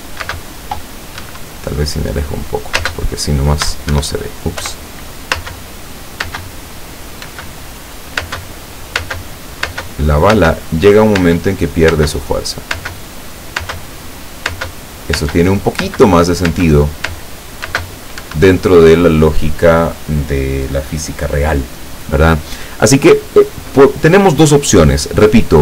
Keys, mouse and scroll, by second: 0.4 space, 1.3 Escape, 1.8-2.4 scroll down 4, 2.8 space, 4.0 Escape, 4.7 p, 6.3 space, 7.3 space, 8.3 space, 9.1 space, 10.5-14.6 typing, 18.3 Escape.